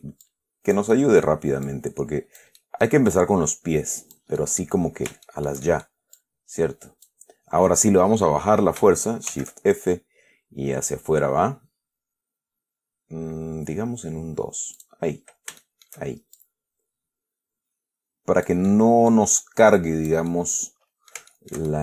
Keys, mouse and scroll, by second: 0.5 click, 1.2-1.7 middle drag, 1.9 click, 2.9-3.3 middle drag, 4.7 middle click, 5.5-6.3 shift+middle drag, 6.5-7.5 shift+drag, 9.6 shift+f, 15.1 click, 15.9-16.3 shift+middle drag, 16.7-18.9 shift+drag, 19.0-19.6 middle drag, 20.6-21.8 middle drag.